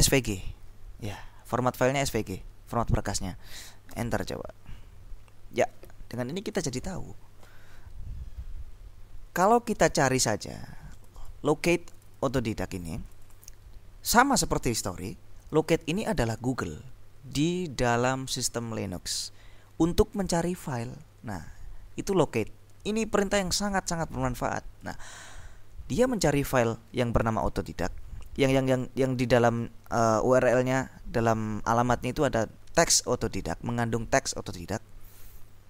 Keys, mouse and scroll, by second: 0.0-0.9 typing, 4.0 Return, 11.0 click, 12.0 click, 13.1 click, 15.9 click, 24.9 click, 26.0 click, 27.3 click.